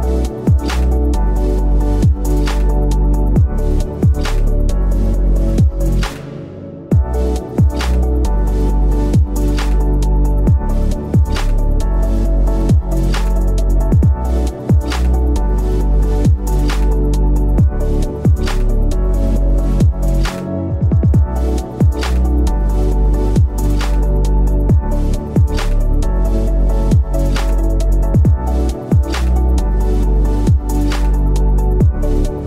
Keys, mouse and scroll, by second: 4.0 ctrl+t.